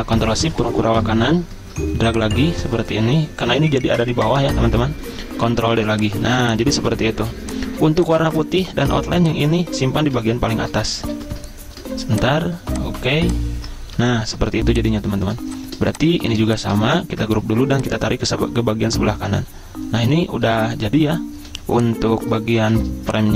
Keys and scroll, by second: 0.6 ctrl+shift+], 5.1 ctrl+d, 6.9 z, 7.2 v, 7.8 z, 8.6 v, 10.2 ctrl+shift+], 11.2 ctrl+z, 14.0 ctrl+shift+], 14.5 z, 15.4 space, 16.9 v, 17.1 ctrl+g, 21.5 z, 22.7 v.